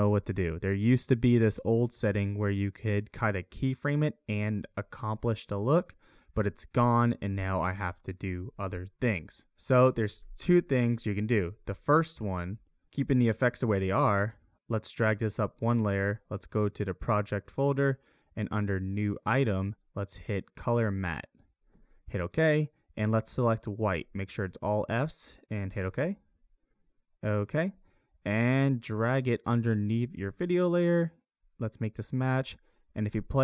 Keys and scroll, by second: 33.1 space.